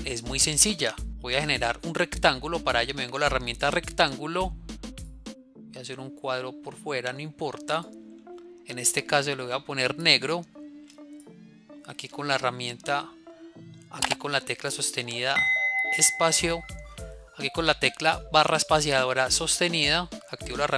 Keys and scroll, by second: 0.3 ctrl+a.